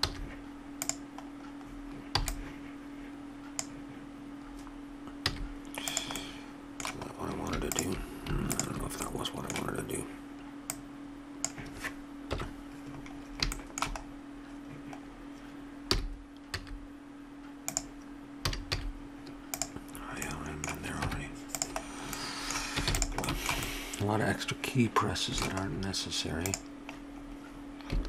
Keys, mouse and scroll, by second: 0.0 z, 1.6 middle click, 2.2 b, 5.2 z, 6.2 middle click, 7.7-10.3 drag, 10.7-12.3 drag, 12.3 KP_1, 13.1-15.9 middle drag, 15.9 g, 18.4 a, 18.7 z, 20.2 middle click, 21.0 Tab, 22.8 ctrl+s, 25.7 middle click, 26.5-28.0 drag.